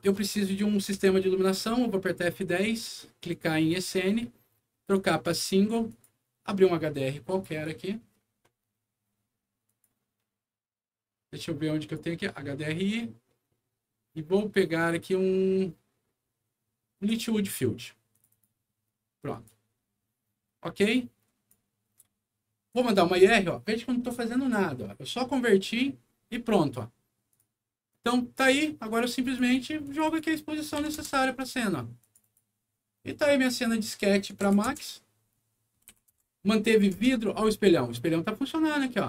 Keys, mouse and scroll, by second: 0.3 middle click, 0.9 F10, 3.4 click, 5.0 click, 5.8 click, 7.2 click, 7.4 click, 9.6 click, 11.7 click, 17.0 click, 18.0 click, 18.2 click, 19.2 click, 20.9 click, 22.6 click, 27.2 click, 27.8 click, 29.2 click, 29.8 click, 30.0 click, 30.7 6, 30.9 Return, 31.9 click, 32.1 click, 33.4 click, 34.4 KP_4, 34.6 Return, 35.8 KP_5, 36.1 Return, 36.6 KP_6, 36.9 Return, 38.0 scroll up 1.